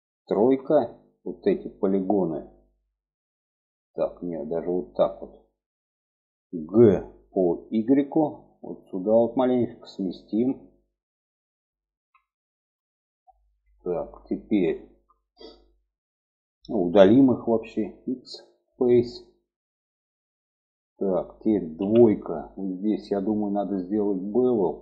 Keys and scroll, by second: 0.4 3, 6.7 g, 17.8 x, 21.8 2.